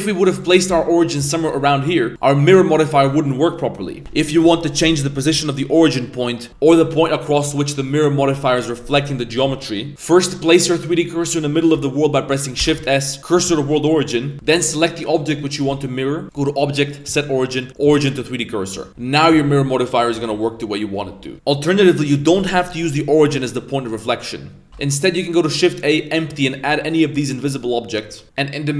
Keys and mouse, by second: 0.7 z, 2.1 click, 4.0 ctrl+z, 4.0 Tab, 5.9 middle click, 9.9 middle click, 12.6 shift+s, 14.3 g, 16.3-17.8 drag, 19.2 click, 20.1 Tab, 23.9 middle click, 24.7 x, 24.7 shift+a, 27.1 g.